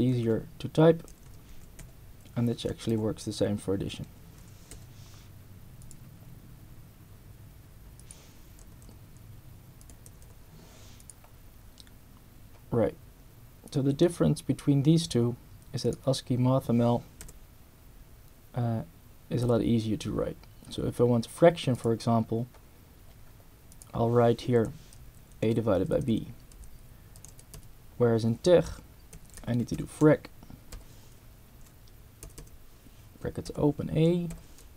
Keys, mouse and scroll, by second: 1.1 Left, 1.5 4, 1.8 a, 2.9 =, 4.4 4, 4.7 b, 5.8 click, 8.0 click, 8.6 Return, 9.8 click, 10.1 Return, 11.0 click, 15.9 click, 17.2 BackSpace, 19.4 /, 21.7 click, 22.9 scroll down 1, 23.7 click, 24.6 BackSpace, 25.8 Up, 26.6 Down, 27.1 Up, 27.3 Right, 28.9-30.7 typing, 32.3 Right, 33.5 ], 34.3 [.